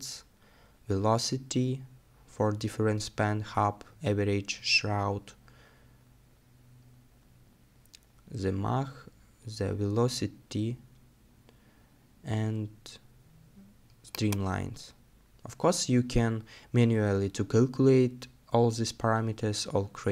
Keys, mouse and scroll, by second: 3.7 scroll up 1, 4.4 scroll up 1, 4.5-10.5 scroll down 1.